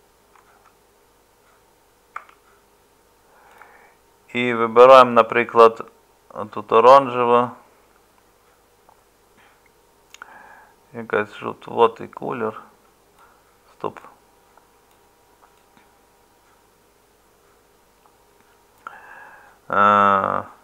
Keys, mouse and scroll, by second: 2.2 Tab.